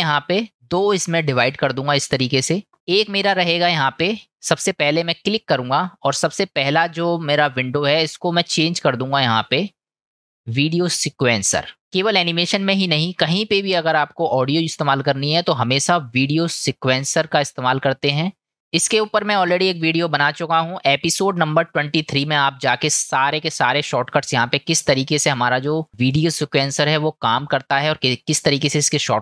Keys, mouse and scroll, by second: 0.9-2.7 drag, 2.8 click, 5.0-11.8 drag, 16.4-18.5 drag.